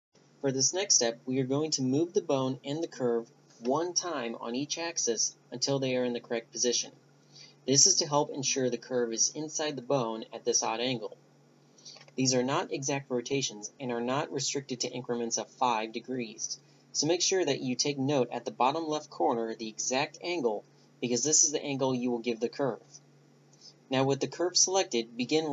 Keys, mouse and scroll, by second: 11.7 ctrl+z, 12.1 ctrl+z, 12.3 ctrl+z, 12.5 click, 13.7 click, 18.5 r, 21.6 Tab, 22.0-23.8 right drag, 22.8 r.